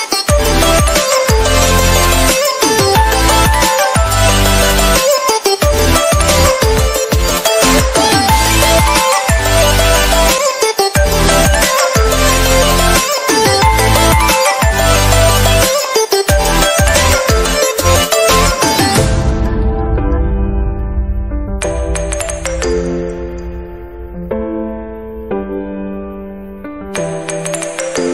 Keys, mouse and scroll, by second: 0.1-2.7 drag, 2.7 right click, 2.8 click, 3.1 ctrl+d, 3.5-4.7 drag, 5.1 click, 7.1 i, 11.3 ctrl+z, 12.2 click, 13.9 click, 14.9 ctrl+d, 16.0 click, 16.7 space, 17.0 ctrl+click, 17.8 alt+click, 20.3 click, 20.6-21.1 typing, 21.2 right click, 21.7 scroll up 1, 22.4 click, 22.9 typing, 23.2 click, 23.6 ctrl+z, 24.5 click, 25.1 ctrl+z, 27.2 space, 27.3 click, 28.0 ctrl+z.